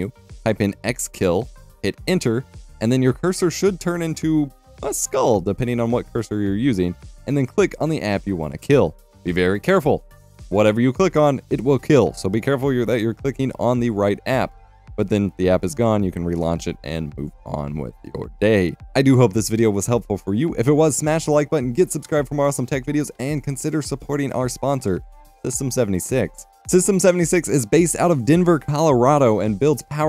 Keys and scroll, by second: 0.8-2.2 typing, 2.5 Return, 10.9-12.3 typing.